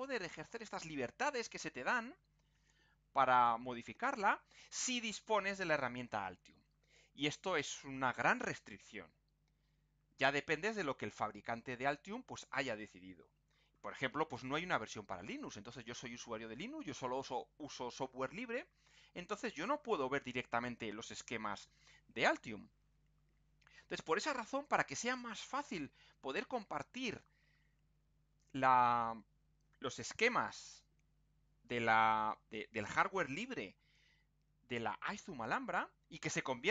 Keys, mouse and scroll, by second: 2.1-2.5 scroll down 2, 13.4-13.8 scroll up 2, 26.8-27.4 scroll up 2.